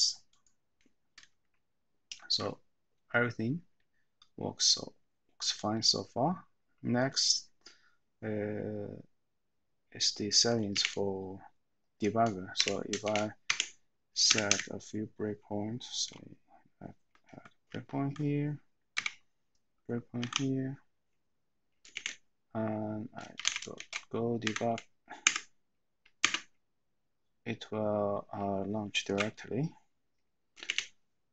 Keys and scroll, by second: 12.6 Escape, 13.0 :, 13.4 Escape, 14.2 Up, 14.4 Up, 17.7 F9, 19.0 Down, 23.5-25.2 typing, 25.2 Tab, 26.2 Return.